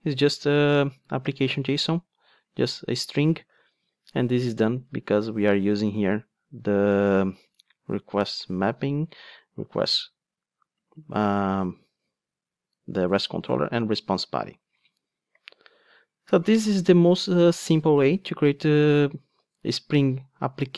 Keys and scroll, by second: 9.8 super+b.